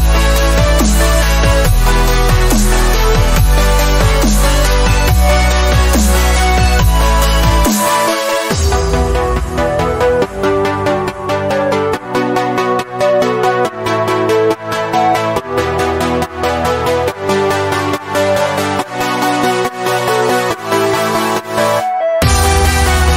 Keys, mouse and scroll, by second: 11.5 click, 12.4 v, 13.8 typing, 17.3 click, 19.6 ctrl+alt+g.